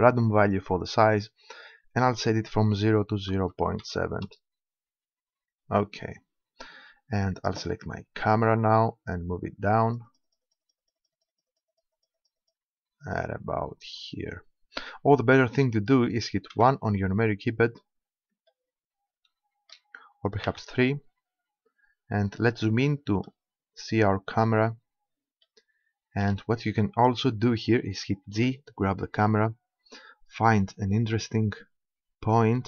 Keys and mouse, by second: 8.2-9.9 right drag, 9.9 middle click, 10.2-14.8 drag, 16.6 KP_1, 18.1-20.5 middle drag, 20.5 KP_3, 21.6 middle click, 24.2-25.4 middle drag, 25.9-28.3 middle drag, 28.3 g.